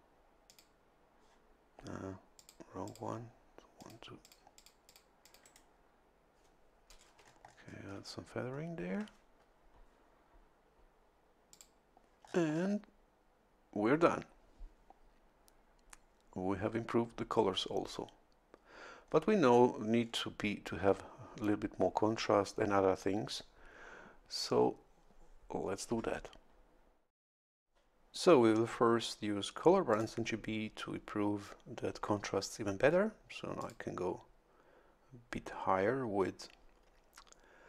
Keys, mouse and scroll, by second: 0.5 click, 2.4 click, 2.8 click, 3.8 click, 4.2 click, 5.2 click, 7.2-8.3 shift+scroll up 2, 8.5 shift+scroll up 2, 11.5 click, 12.2-12.8 scroll down 2, 19.0 scroll up 2, 20.0 scroll down 2, 29.9 click, 33.6 click.